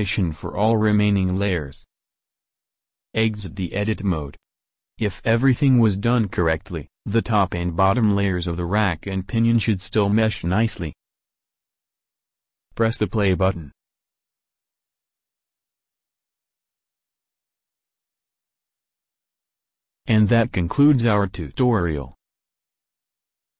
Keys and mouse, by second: 0.1 g, 0.5 click, 3.0 Tab, 3.4-4.8 middle drag, 6.7-8.4 middle drag, 9.1-12.7 middle drag, 12.7-14.5 drag, 15.1 middle click, 19.8 click, 20.0-21.1 middle drag.